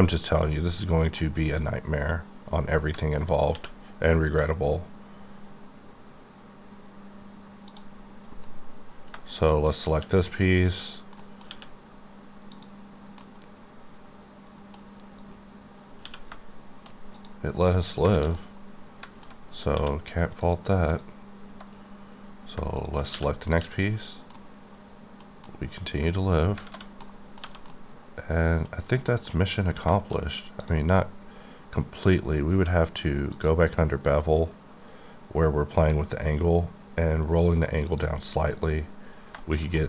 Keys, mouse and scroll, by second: 1.2 middle click, 3.5 q, 4.3 click, 7.7 click, 9.9 q, 11.2 middle click, 11.4 q, 12.5 click, 13.5-14.8 middle drag, 16.0 q, 17.1 click, 17.5 scroll down 3, 17.7 middle click, 18.1 alt+a, 18.3 middle click, 19.5 click, 19.7 q, 20.4 click, 20.9 click, 21.8-22.2 scroll down 4, 22.8 shift+click, 23.0 click, 23.1 q, 23.7 click, 24.5 middle click, 25.4 middle click, 32.6 q, 33.3 click, 36.7 alt+scroll down 3.